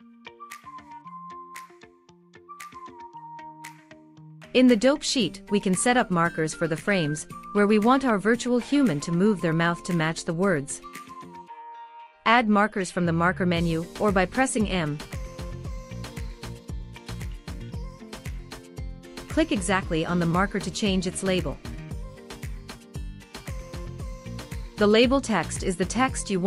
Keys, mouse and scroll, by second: 2.4-4.0 drag, 5.7-9.4 drag, 10.8 click, 13.1-18.1 drag, 20.5 click, 20.7-22.1 drag, 23.5 click, 23.7 click.